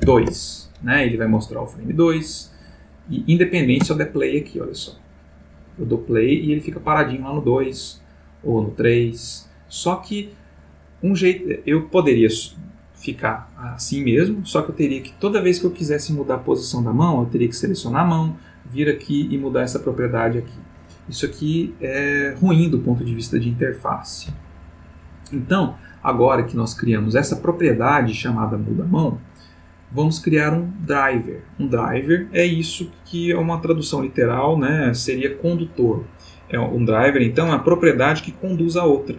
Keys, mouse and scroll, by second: 0.0 2, 0.2 Return, 1.9 click, 2.9 click, 3.8 space, 6.8 Escape, 8.4 click, 17.6 click, 26.8 click.